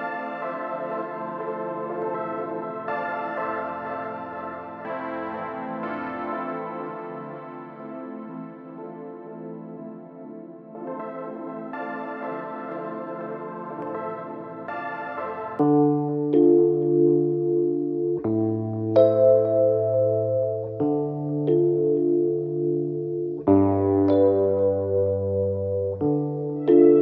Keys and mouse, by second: 3.6 click, 6.1 drag, 10.0 click, 11.1 click, 12.4-14.3 drag, 15.3-16.2 drag, 19.0 click, 19.9-21.0 drag, 22.0 click, 23.9 alt+middle click, 25.6-25.9 alt+drag, 26.3 alt+click, 26.7 click.